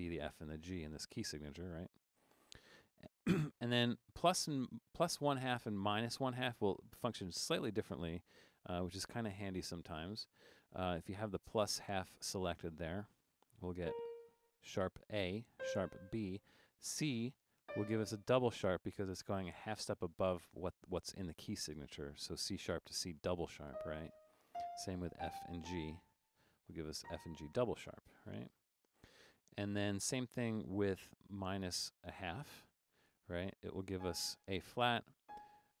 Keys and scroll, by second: 1.0-3.1 typing, 10.2 shift+Down, 13.8 a, 15.6 b, 17.7 c, 23.8-25.6 typing, 27.0 typing, 28.3-29.8 typing, 34.0 a, 35.2-35.8 typing.